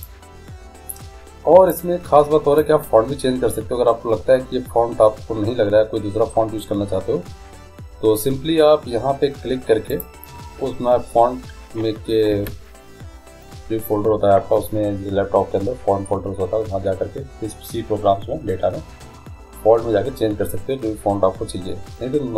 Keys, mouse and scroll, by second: 0.2-3.7 drag, 10.1 click, 12.5 Escape.